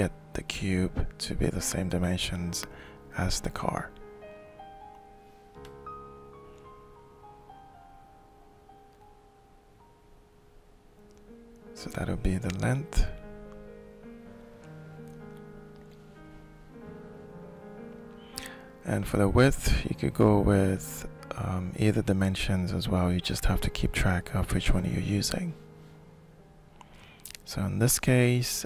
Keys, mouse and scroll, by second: 2.6 click, 3.1-4.4 shift+right drag, 6.0 click, 15.5 click.